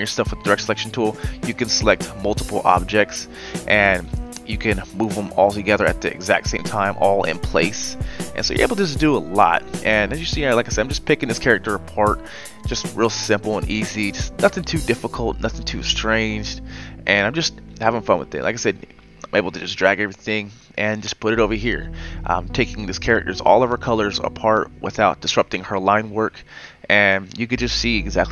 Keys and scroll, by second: 7.7 ctrl+z.